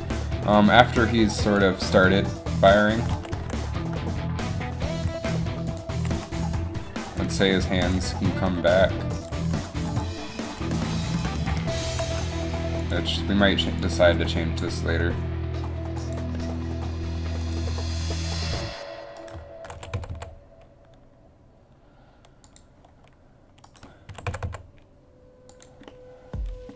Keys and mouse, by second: 0.8 g, 1.8 r, 3.3 alt+r, 5.1 r, 6.1 r, 7.4 g, 8.7 g, 9.5 r, 10.6-14.2 typing, 17.6 right click, 17.7 r, 19.9 r, 24.2 r.